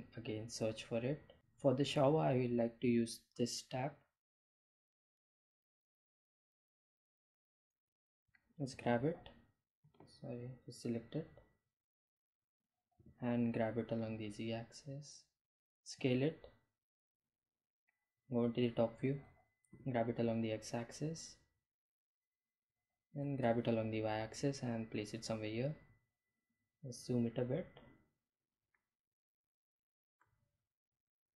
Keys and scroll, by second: 9.7 g, 10.1 z, 13.7 g, 13.9 z, 16.6 s, 18.7 Home, 20.1 g, 20.3 x, 23.4 g, 23.6 y, 26.4 Delete.